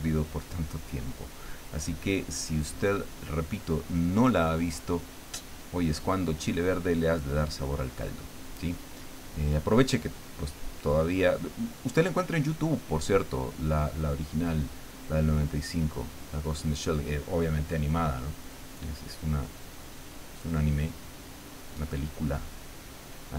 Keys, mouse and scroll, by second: 1.5-3.2 drag, 7.1-8.8 drag, 9.5 click, 10.7-12.2 drag, 12.5-13.8 drag, 14.3-16.2 drag, 16.7-17.9 drag, 18.7-19.9 drag, 20.1 click, 21.4-22.7 drag, 23.1 click.